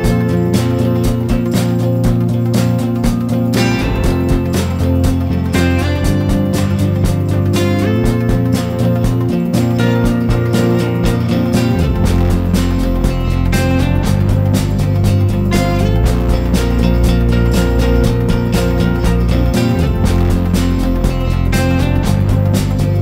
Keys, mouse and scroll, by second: 0.8 click.